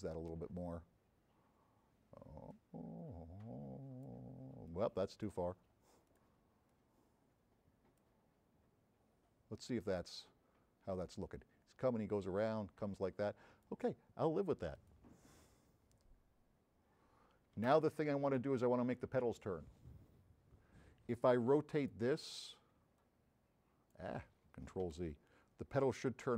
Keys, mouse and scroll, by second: 0.1 click, 0.8 scroll down 1, 2.4-4.0 drag, 4.7 click, 6.1 click, 6.7-8.2 drag, 10.0 click, 15.8-17.1 scroll up 7, 18.2 click, 21.8 click, 23.0-24.1 drag, 25.0 z, 26.0-26.3 drag.